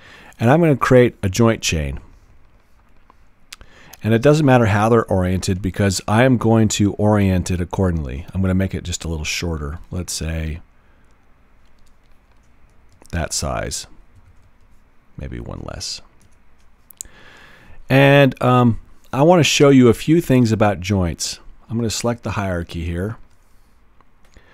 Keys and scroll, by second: 4.9 Return, 14.2 super+z.